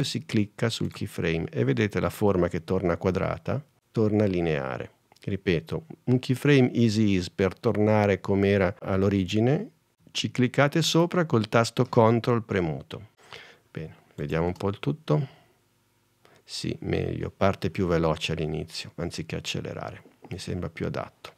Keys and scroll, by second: 14.6 space.